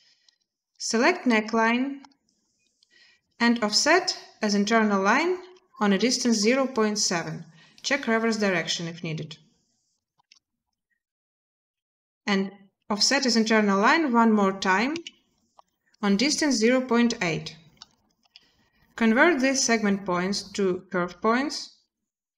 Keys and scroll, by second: 6.0 typing, 15.3 typing, 16.3 Return, 16.6 typing, 18.0 z, 21.3 typing.